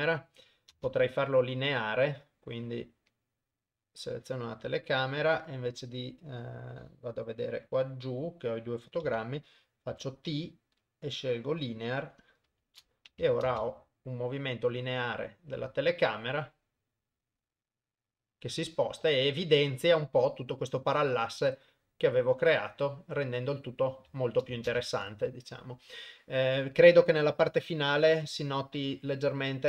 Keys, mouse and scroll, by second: 0.9 shift+space, 1.6 click, 3.1 click, 4.9 middle click, 6.8-9.1 drag, 9.2 a, 10.0 t, 12.7 shift+Left, 13.6 shift+space, 24.6 shift+space, 25.1 ctrl+s, 27.6 click, 28.1 click.